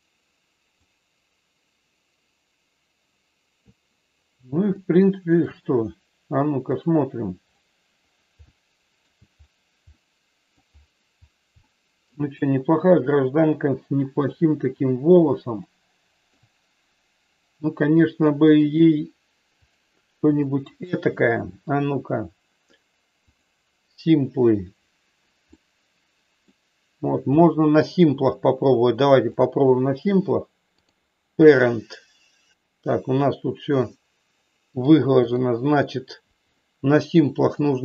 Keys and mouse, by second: 4.7 shift+middle click, 8.4 shift+middle click, 10.0 middle click, 11.7 shift+middle click, 14.5 KP_1, 15.5 shift+middle click, 18.7 click, 19.7 click, 25.5 middle click, 27.4 middle click, 29.4-30.9 drag, 34.7 click.